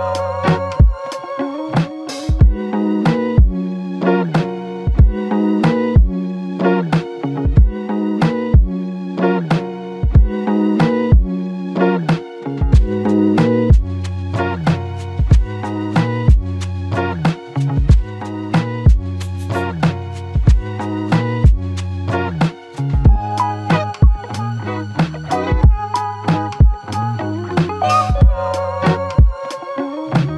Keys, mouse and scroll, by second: 0.1 typing, 1.0 double click, 9.8 typing, 12.2 double click, 18.7 alt+click, 20.5 double click, 29.5 double click, 29.9 alt+click.